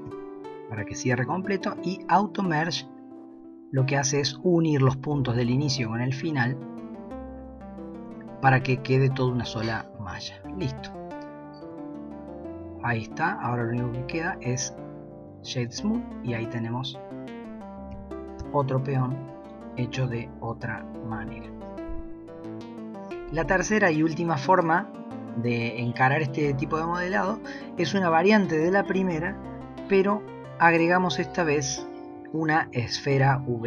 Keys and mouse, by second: 3.1 middle click, 10.1 middle click, 11.6 Tab, 12.1-13.5 middle drag, 16.0-16.8 middle drag, 17.0-17.3 middle drag, 17.9 g, 19.6-20.4 middle drag, 20.8 middle click, 28.9 shift+a.